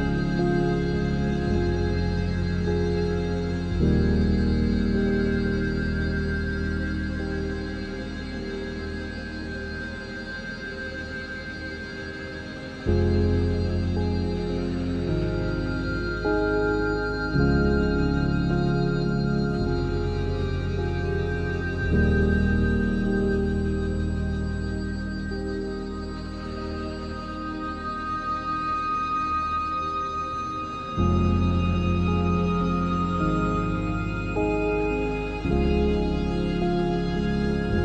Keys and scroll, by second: 14.3 ctrl+d, 25.3 ctrl+alt+z.